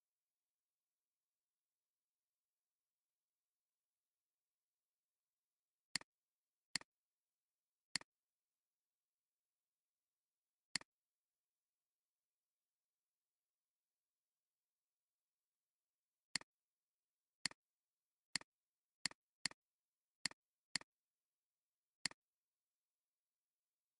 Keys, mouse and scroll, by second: 6.3 alt+scroll down 1, 6.6 space, 7.1 space, 7.4 alt+scroll up 3, 10.7 space, 11.9 scroll down 1, 12.9 scroll down 1, 13.2 scroll up 1, 13.4 scroll down 1, 13.6 scroll up 1, 19.4 double click, 19.8 alt+scroll down 1, 20.1 space, 20.6 space, 21.2 alt+scroll up 1.